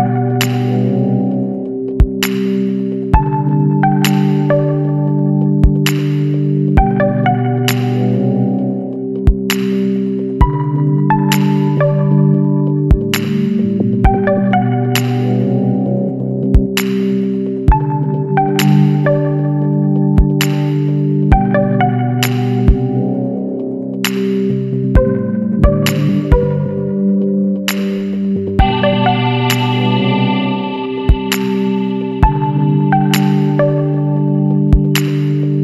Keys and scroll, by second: 3.1-4.3 typing, 17.4 shift+Page_Down, 28.3 ctrl+space, 32.9 F11.